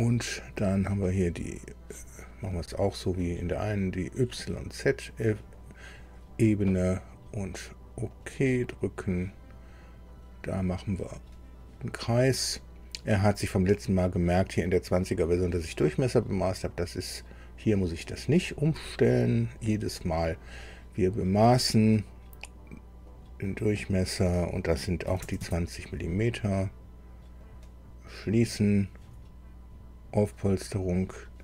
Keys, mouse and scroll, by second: 2.5 middle click, 5.4 click, 8.1 click, 11.0 click, 18.1 click, 18.9 click, 19.3 right click, 20.3 click, 23.1 click, 25.1 KP_2, 25.2 KP_0, 25.4 KP_Enter, 27.4 click, 30.4 click.